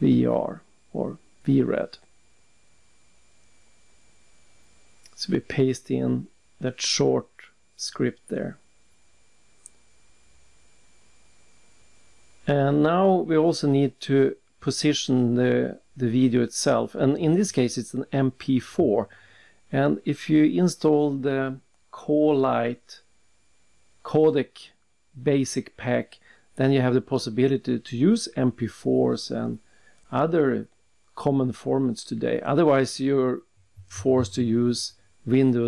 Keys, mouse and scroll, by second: 0.6 alt+Tab, 1.9 click, 2.7 ctrl+c, 3.2 alt+Tab, 3.9 right click, 4.7 click, 6.5 click, 8.8 alt+Tab, 12.3 click, 12.8 click, 16.9 alt+Tab, 18.5 click, 19.1 click, 21.7 click, 22.2 click, 23.6 click, 24.9 click, 29.4 click, 30.8 ctrl+c, 31.2 alt+Tab, 32.1 alt+Tab, 33.4 alt+Tab, 35.0 click.